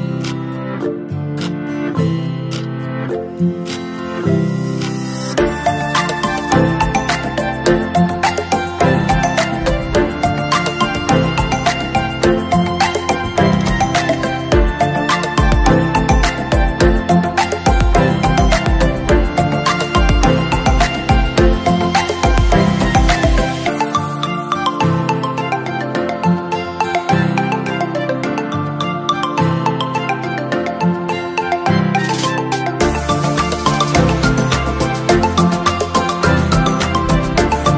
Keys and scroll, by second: 2.2 ctrl+=, 7.3 ctrl+z, 13.2 ctrl+-, 13.4 ctrl+=.